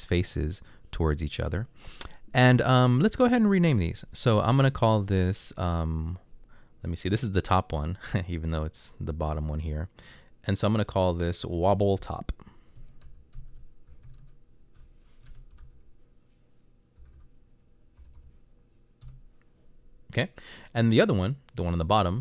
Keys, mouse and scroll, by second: 12.6-18.3 typing, 19.0 Return.